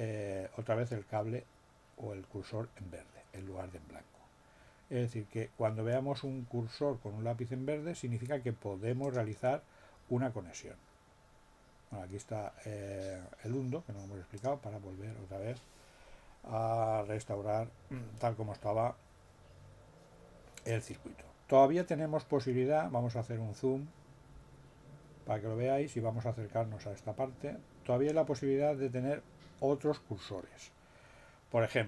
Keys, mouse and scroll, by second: 9.0 click, 14.3 click, 24.1 scroll down 2, 25.0 scroll down 2, 27.4-27.7 scroll up 2.